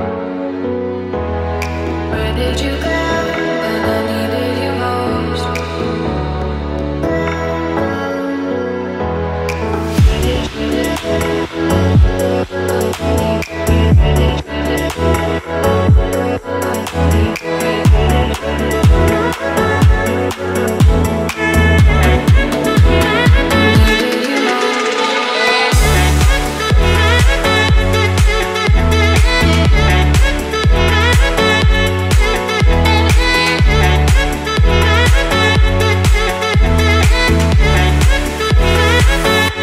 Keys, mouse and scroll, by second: 0.4 click, 1.2 Tab, 1.9 click, 3.8 l, 4.8 s, 7.5 click, 9.1 click, 10.6 l, 11.8 s, 14.4 click, 15.9 Tab, 16.5 click, 16.8-17.3 scroll down 1, 17.3-20.8 middle drag, 21.1 click, 21.7 shift+click, 24.7 ctrl+j, 27.6-29.7 drag, 30.3-30.6 scroll down 1, 31.1 KP_1, 32.0 scroll down 1, 32.4-32.9 shift+middle drag, 38.7 shift+d, 39.3-39.6 right drag.